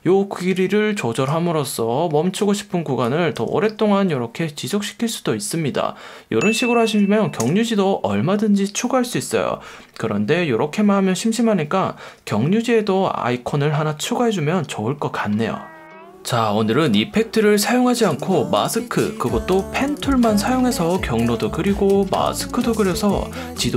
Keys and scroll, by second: 3.5 space, 12.7 F1, 14.0 F1.